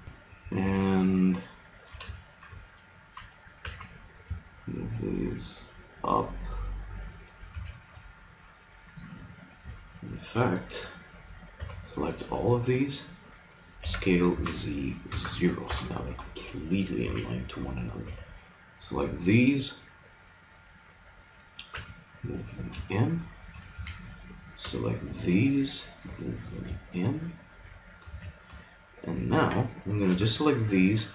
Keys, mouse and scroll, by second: 0.7 middle click, 3.7 g, 7.5 a, 9.7-11.5 middle drag, 11.5 b, 13.8 s, 17.1 a, 18.1 b, 21.7 g, 23.7 a, 24.6 b, 26.1 g, 28.1 a, 30.1 b.